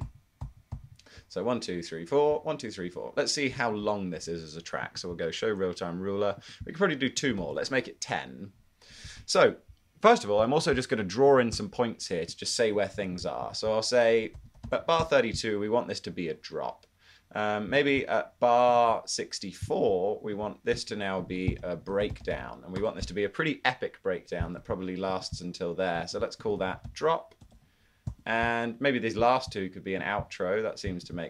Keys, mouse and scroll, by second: 0.6 super+d, 7.4 super+d, 14.2-15.3 typing, 21.3-22.9 typing, 26.5-27.5 typing, 28.1 Return.